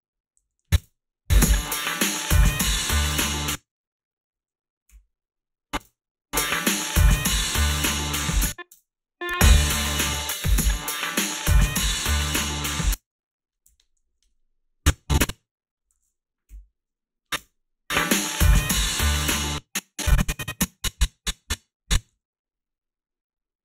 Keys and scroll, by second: 0.4 a, 0.8 space, 3.3 space, 5.8 space, 8.2 space, 8.7 space, 12.7 space, 13.0 a, 13.6 h, 14.1 a, 17.3 space, 19.3 space, 22.2 s.